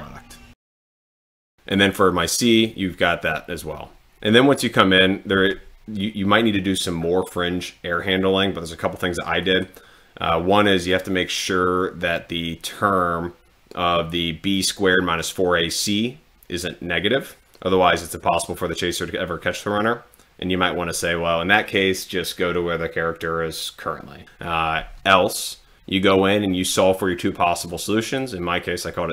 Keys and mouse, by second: 9.4 click, 27.7 click.